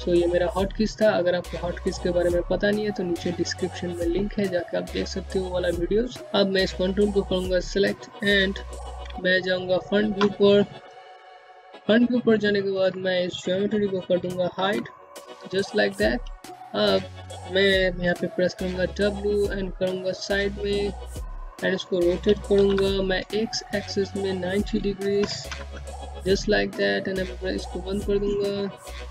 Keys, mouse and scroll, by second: 6.2 space, 6.5 click, 9.8 space, 10.0 click, 10.3 space, 13.6 2, 15.0 alt+middle click, 15.3-17.0 scroll up 1, 18.0-18.9 scroll up 1, 18.9 click, 22.0 c, 23.6 click, 24.7 KP_9, 24.9 KP_0, 25.1 KP_Enter, 27.3 click, 28.0-29.1 scroll up 1.